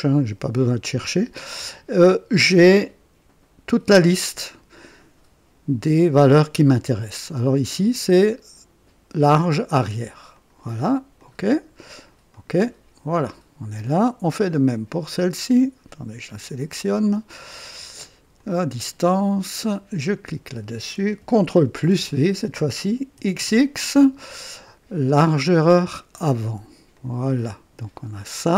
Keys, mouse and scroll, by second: 10.3 click, 11.2 click, 12.3 click, 13.2-13.5 scroll down 2, 14.7 click, 15.3 click, 16.5 click, 18.3 click, 20.0 click, 21.8 ctrl+v, 23.1 x, 23.3 x, 25.0 click, 26.1 click, 26.9 click.